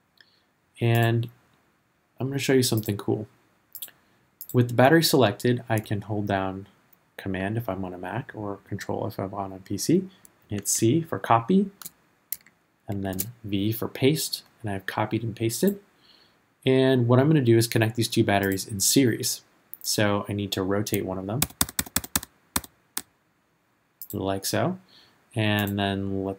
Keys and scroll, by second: 10.5 super+c, 12.9 super+v, 21.6 r.